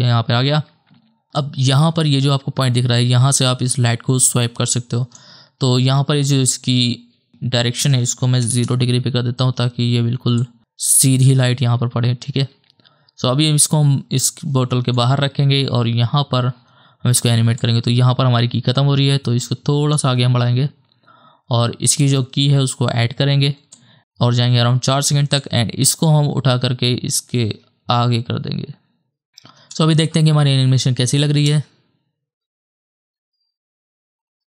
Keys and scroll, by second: 9.6 KP_0, 9.8 Return, 29.7 KP_0, 31.5 KP_0.